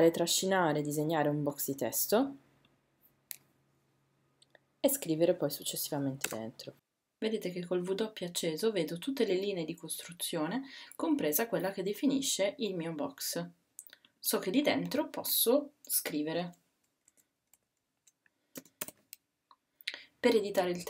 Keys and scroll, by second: 18.6 space, 18.8 d.